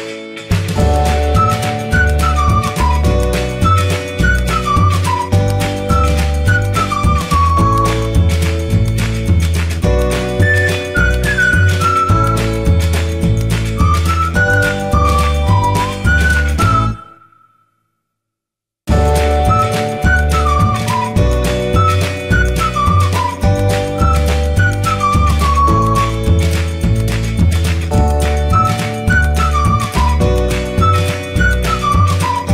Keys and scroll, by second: 15.8 ctrl+shift+e.